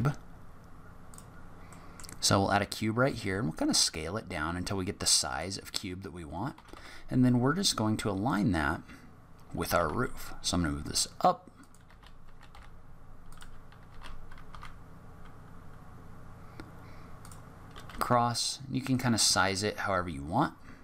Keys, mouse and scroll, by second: 1.7 middle click, 3.1 s, 6.5 g, 9.6 g, 11.8 g, 13.8 g, 17.5 scroll up 2, 17.8 s, 19.1 g.